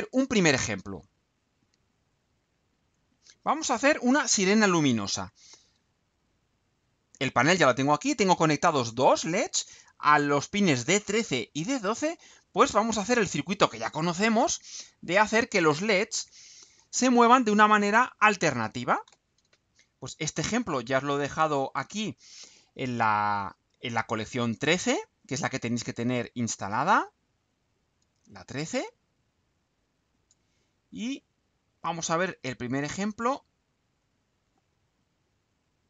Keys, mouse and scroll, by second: 0.4-0.9 scroll down 2, 0.9 scroll down 2, 1.8 scroll down 2, 3.0-3.7 scroll down 4, 6.3 click, 15.3 click, 17.5 click, 27.2 click, 28.8-30.5 drag, 34.0 click, 35.2 scroll down 1, 35.6-35.8 right drag.